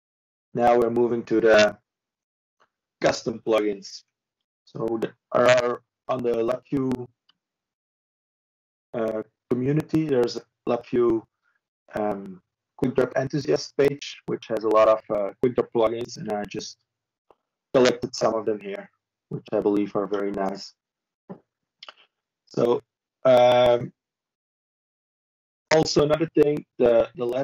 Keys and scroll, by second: 2.8 ctrl+space, 3.8 ctrl+k.